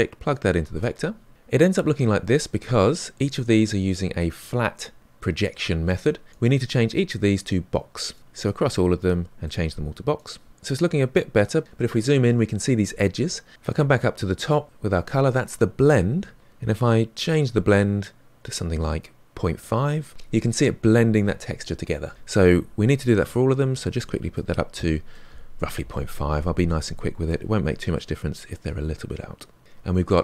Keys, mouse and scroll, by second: 7.1 click, 7.5 middle click, 7.9 click, 8.1 middle click, 8.9 click, 8.9 middle click, 9.3-11.1 drag, 11.1-12.7 scroll up 4, 13.1-13.5 scroll up 1, 13.5-19.1 drag, 23.3-29.6 drag, 29.6-29.9 scroll down 3, 29.9 middle click.